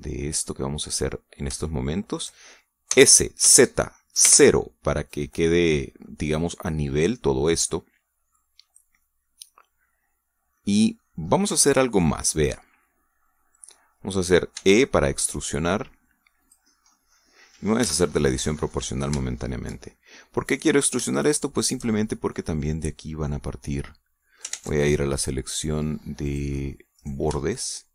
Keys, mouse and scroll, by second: 0.1 shift+right click, 0.6 shift+right click, 0.9-2.2 shift+middle drag, 2.6 shift+middle click, 3.9 s, 4.4 z, 5.2 KP_0, 6.1 click, 7.0 middle click, 7.9-9.5 middle drag, 9.9-12.1 middle drag, 12.6-14.9 middle drag, 15.5 e, 17.4 click, 17.9 middle click, 18.8 o, 19.1 middle click, 20.2 shift+middle click, 21.2 middle click, 21.8 shift+right click, 22.1 shift+right click, 22.6 shift+right click, 22.9-25.5 shift+middle drag, 25.5 ctrl+Tab, 27.2 click.